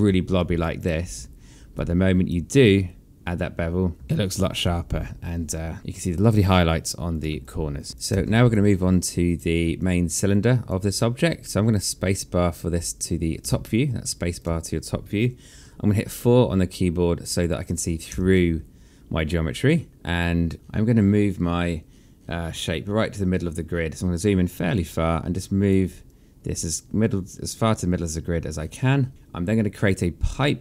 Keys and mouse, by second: 0.2 alt+click, 1.0 1, 1.6 right click, 3.9 click, 4.1 alt+click, 6.2 right click, 7.2 click, 7.5 alt+click, 7.9 w, 8.1 alt+click, 9.5 alt+click, 10.6 click, 13.2 space, 17.0 click, 17.9 4, 24.6 click, 26.0 click.